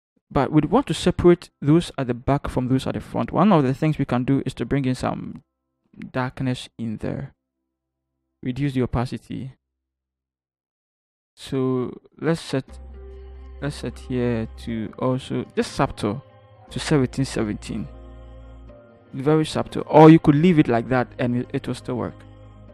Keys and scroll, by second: 7.6 typing.